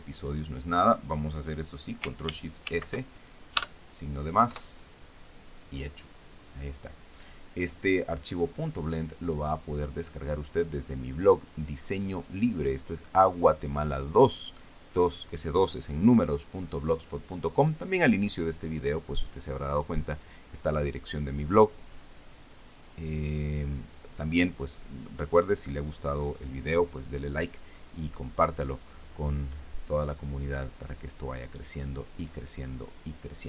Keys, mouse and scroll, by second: 3.3 ctrl+shift+s, 4.2 KP_Add, 5.1 KP_Enter.